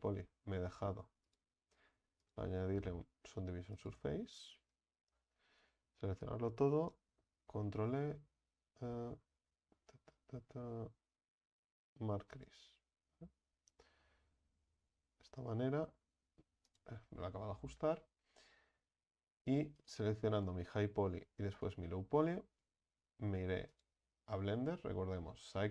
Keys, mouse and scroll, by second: 4.0-4.7 drag, 4.7 Tab, 5.2 a, 5.6 a, 17.1 Tab, 19.8 right click, 20.4 right click, 21.5 shift+right click.